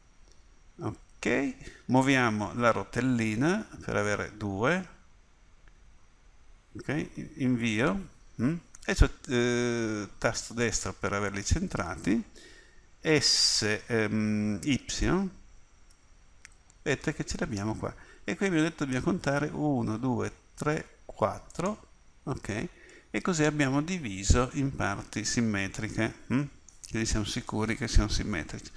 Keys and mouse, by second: 15.3 s.